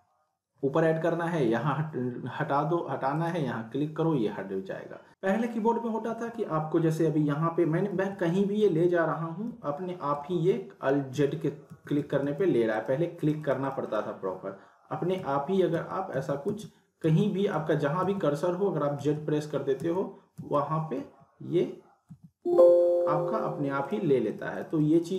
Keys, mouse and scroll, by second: 3.1 click, 6.0 z, 8.6-12.3 typing, 12.7 click, 15.3-22.9 typing, 23.8 click.